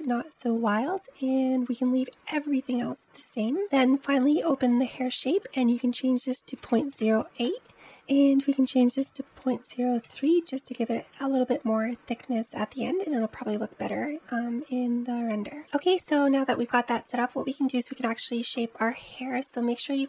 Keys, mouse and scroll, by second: 2.5-3.5 scroll down 9, 3.5-10.5 drag, 12.2-14.7 scroll down 3, 14.7-15.4 scroll down 2, 15.6-19.2 scroll up 36.